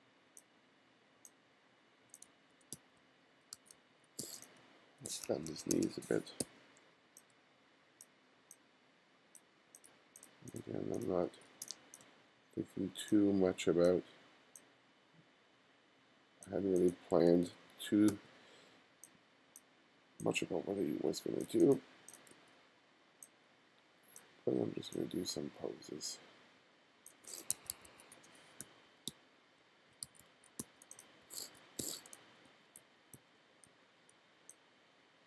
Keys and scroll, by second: 2.3 f, 2.7 g, 3.6 f, 4.2 g, 5.3 2, 6.4 b, 11.3 b, 11.6 space, 17.3 space, 17.8 space, 18.1 b, 22.3 b, 27.5 1, 28.6-32.5 typing, 34.2 b.